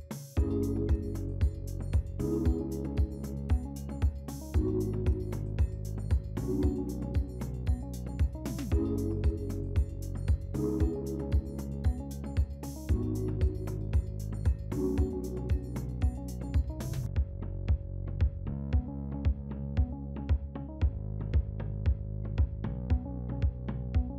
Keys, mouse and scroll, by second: 4.1 scroll up 2, 5.0-6.3 scroll down 3, 15.7 scroll up 1, 16.2-16.8 scroll up 1, 16.8-17.3 scroll down 2, 17.6-20.7 scroll down 2, 20.7-22.4 scroll up 2, 22.5-22.8 scroll down 2.